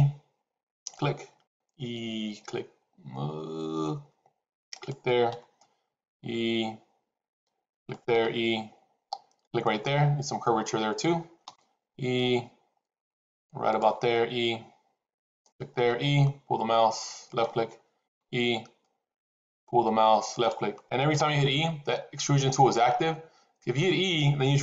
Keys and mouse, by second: 1.4 e, 5.2 e, 8.0 e, 11.4 e, 13.9 e, 15.7 e, 18.0 e, 21.1 e.